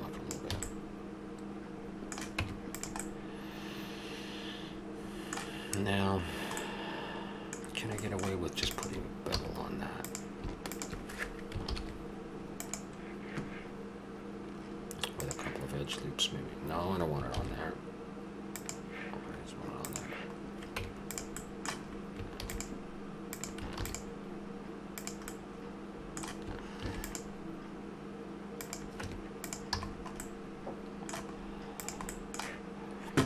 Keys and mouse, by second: 0.5 a, 2.4 Tab, 6.7-8.7 middle drag, 8.7 click, 9.4 a, 9.7-11.7 drag, 11.7 ctrl+l, 15.9-17.0 middle drag, 17.3 ctrl+z, 20.4 click, 20.8 Tab, 22.4 ctrl+r, 23.8 ctrl+r, 29.0 Tab, 29.8 a, 31.8 right click, 32.1-33.2 drag.